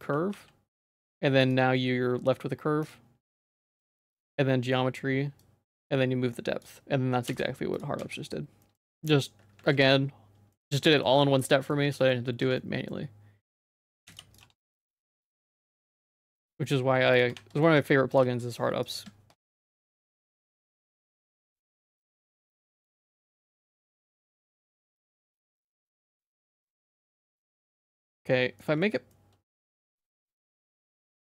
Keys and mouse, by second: 0.4 g, 5.5-6.7 drag, 7.3 x, 7.8 click, 8.0 z, 8.7 middle click, 9.0 shift+middle click, 9.7 ctrl+s, 10.6 middle click, 10.9 shift+middle click, 11.5 middle click, 12.0 shift+middle click, 12.5 Tab, 12.6 middle click, 13.8 Tab, 14.1 x, 14.5 Tab, 14.8 Tab, 15.2 ctrl+a, 16.6 ctrl+a, 17.3 Tab, 17.7 shift+middle click, 18.3 2, 18.9 ctrl+click, 19.9 ctrl+click, 20.3 q, 28.2 middle click, 28.9 ctrl+s, 29.1 middle click, 29.6 shift+middle click, 29.9-31.2 middle drag.